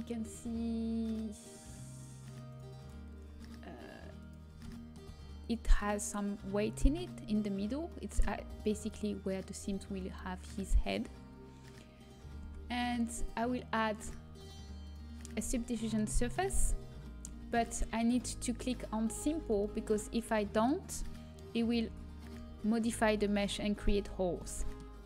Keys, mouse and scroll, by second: 0.2-3.8 drag, 3.8-6.5 middle drag, 7.9-9.0 middle drag, 12.4 Tab, 13.1-15.5 drag, 15.7 click, 16.5-18.0 middle drag, 18.0 click, 19.6-22.4 middle drag, 21.8 Tab, 22.4 Tab, 24.4-25.0 middle drag.